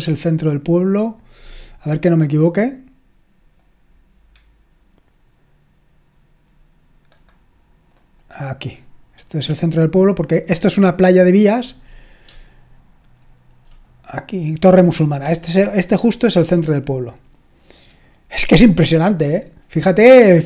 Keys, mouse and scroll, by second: 3.6-9.6 drag, 9.9-11.1 drag, 12.4-13.1 scroll up 1, 13.1-13.8 scroll up 1, 13.9-15.9 drag, 15.5-17.1 scroll up 2, 17.1-18.3 scroll up 1, 18.3-19.2 scroll down 2, 19.2-20.4 scroll down 1.